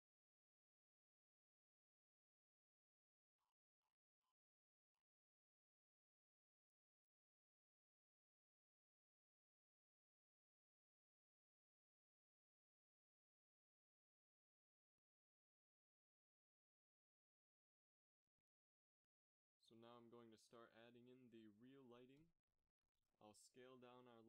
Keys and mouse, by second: 1.0 ctrl+s, 2.1 z, 2.2 z, 4.8 middle click, 5.9 middle click, 7.6 g, 11.8 shift+z, 16.6 z, 16.8 z, 18.7 click, 19.1 x, 20.2 a, 21.2 s.